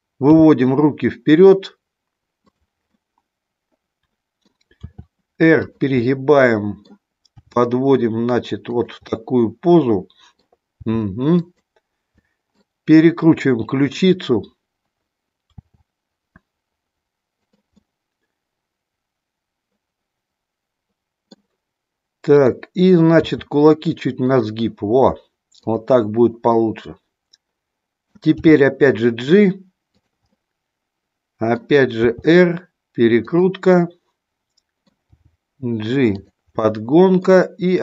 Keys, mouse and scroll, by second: 0.4 g, 2.9-4.5 middle drag, 4.9 r, 6.0 middle click, 7.2 g, 8.6 click, 9.1 scroll up 1, 9.2-10.5 middle drag, 10.7 g, 11.4 click, 12.1 scroll up 1, 12.2 middle click, 13.9 click, 15.5 r, 17.7-21.3 middle drag, 22.4 click, 23.3 r, 24.3 click, 25.6 click, 26.5-28.0 middle drag, 28.4 g, 30.2 scroll up 1, 30.5 middle click, 32.0 r, 33.7-34.9 middle drag, 35.0 g, 36.6 middle click.